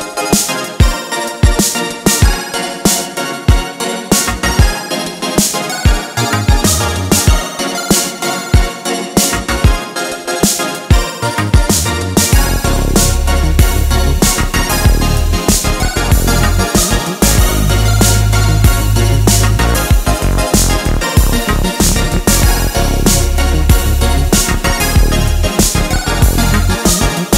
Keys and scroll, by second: 5.7-6.5 typing.